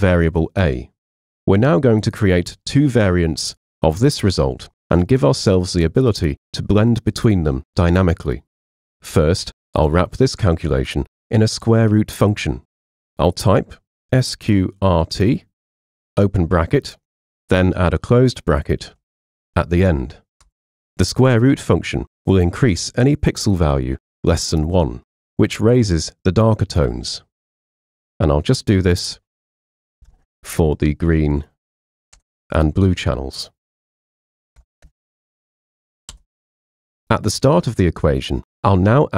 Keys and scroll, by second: 13.8-16.1 typing, 19.2 shift+0, 20.5 Return, 29.5-30.9 typing, 32.1 shift+0, 32.2 Return, 34.1-35.8 typing, 36.2 Return.